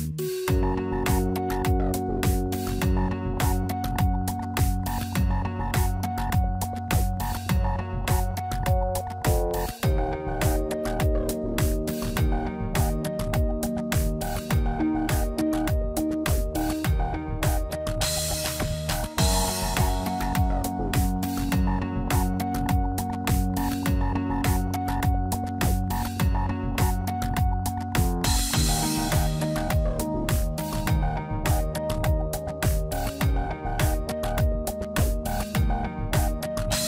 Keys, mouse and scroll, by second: 3.8 middle click, 5.5 click, 6.9 alt+click, 7.8 alt+e, 11.0 click, 11.7 shift+middle click, 12.1 middle click, 12.8 shift+middle click, 13.7 click, 16.7 middle click, 18.2 scroll up 1, 18.6 middle click, 19.8 alt+shift+click, 21.4 p, 24.1 Tab, 24.8 click, 25.4 middle click, 25.9 Tab, 26.3 shift+middle click, 26.8 middle click, 28.4 alt+click, 29.3 click, 30.4 alt+click, 31.0 middle click, 32.5 f, 32.8 middle click, 34.0 shift+middle click, 34.4 middle click, 36.0 Tab, 36.7 Tab.